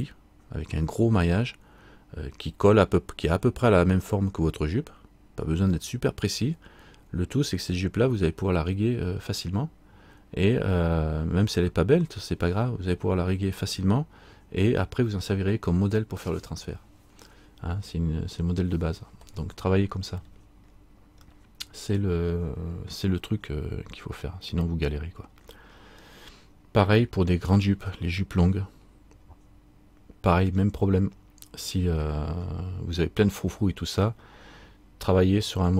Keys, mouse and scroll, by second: 20.4 middle click, 21.5 middle click, 25.5-26.1 scroll down 1, 26.2 middle click.